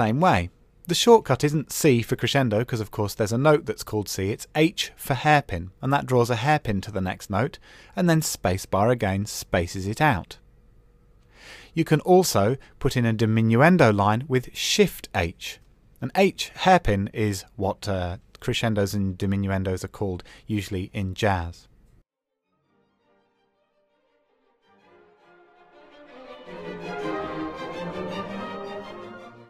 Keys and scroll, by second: 11.3 super+z.